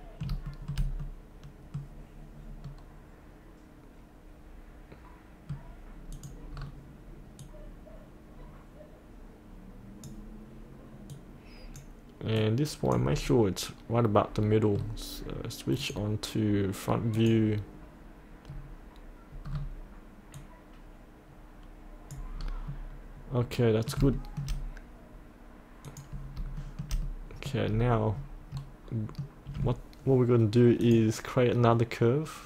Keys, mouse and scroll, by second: 0.5-5.8 shift+middle drag, 6.1 click, 6.6-7.4 scroll down 1, 7.4-13.3 drag, 13.3 middle click, 15.8 click, 18.6-20.4 scroll down 1, 20.4-22.5 drag, 22.5-23.6 scroll up 1, 23.6 middle click, 24.1 shift+middle click, 25.9 click, 26.6 shift+middle click, 27.2 middle click, 27.7-28.1 scroll down 1, 28.1-28.6 scroll up 1, 28.6 middle click, 30.9 click.